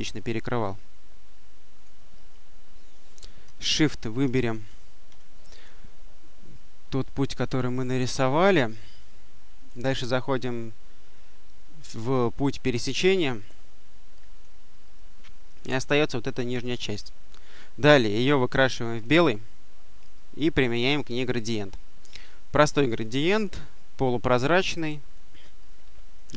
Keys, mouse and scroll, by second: 0.0-2.2 drag, 4.2 shift+click, 9.6 click, 14.2 click, 18.8 click, 21.2 click, 22.7 click.